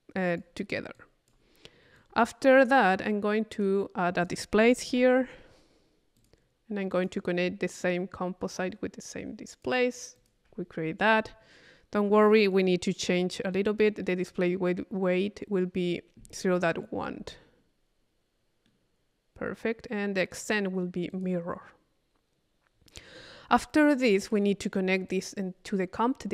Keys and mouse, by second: 1.0 click, 2.0-3.0 drag, 3.5 right click, 4.2 click, 4.9 i, 6.2 click, 6.9 click, 7.8-10.9 drag, 14.0-15.8 middle drag, 18.7 middle click, 20.3 click, 21.1 click, 24.0 click, 25.1-26.3 drag.